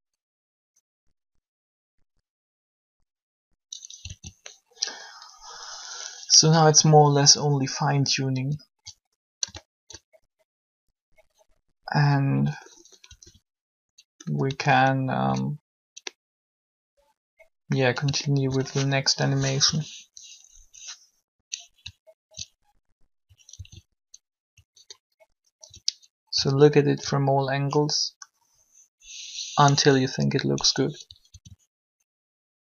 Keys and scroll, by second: 4.0 alt+a, 13.0 alt+a, 19.6 alt+shift+3, 23.5 alt+shift+a, 29.5 1, 31.2 alt+a.